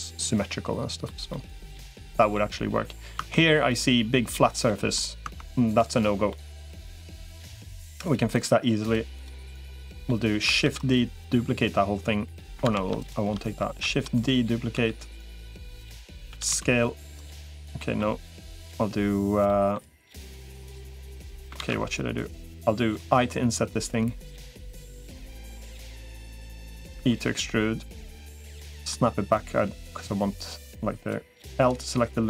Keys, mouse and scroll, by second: 1.1-2.2 middle drag, 3.0 Tab, 4.5 middle click, 5.2 Tab, 6.1 middle click, 8.6 shift+click, 9.0 shift+click, 9.4 middle click, 10.6 shift+d, 12.6 ctrl+z, 12.8 shift+click, 13.6 shift+d, 14.6 s, 16.2 s, 17.7 middle click, 19.3 middle click, 20.2 e, 21.4 ctrl+z, 23.0 i, 26.8 e, 28.3 middle click, 29.2-30.4 drag, 31.4 l, 32.0 click.